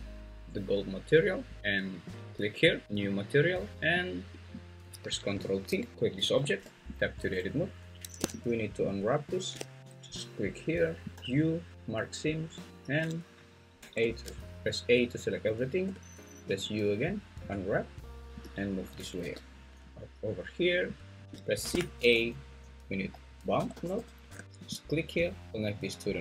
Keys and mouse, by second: 3.1 click, 4.0 click, 4.3 click, 5.9 ctrl+g, 6.2 Escape, 6.6 Tab, 11.1 click, 11.1 u, 13.8 a, 15.8 u, 18.4-21.1 drag, 19.2 g, 21.6 shift+a, 25.5-26.2 drag.